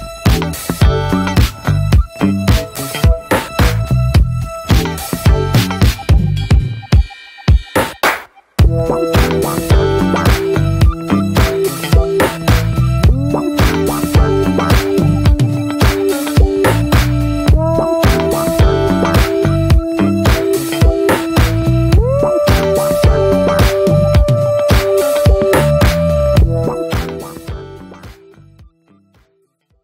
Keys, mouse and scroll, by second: 0.7 click, 1.5-7.6 drag, 7.6 scroll up 4, 15.0-22.9 drag, 22.9-24.6 middle drag, 24.6 ctrl+s, 25.2-26.4 middle drag, 26.4 ctrl+s, 28.4 scroll up 4, 29.2 scroll up 1.